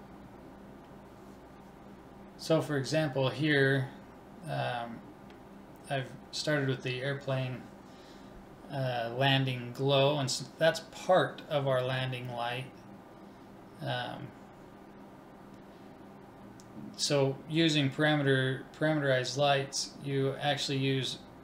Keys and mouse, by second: 2.3 BackSpace, 9.1-11.0 middle drag, 13.1-14.8 drag, 14.6 m, 18.0-19.9 drag, 19.8 middle click.